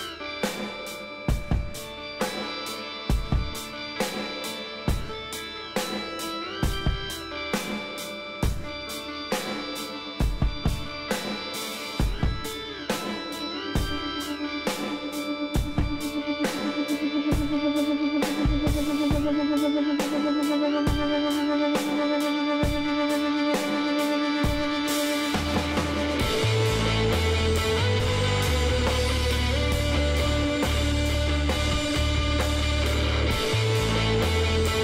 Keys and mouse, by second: 0.0-1.7 drag, 1.7 b, 2.2-4.5 drag, 4.1 z, 5.7-6.8 middle drag, 7.1 Tab, 7.5 middle click, 9.1 a, 9.8 a, 13.1-15.8 middle drag, 15.8-17.1 drag, 16.2 Tab, 16.3 Tab, 16.7 Tab, 17.1 middle click, 19.8-21.9 middle drag, 21.9 KP_3, 22.5-25.0 middle drag, 25.0-28.9 drag, 28.9 middle click, 29.0-32.2 drag, 31.7 ctrl+z, 32.5-34.0 drag, 33.3 x.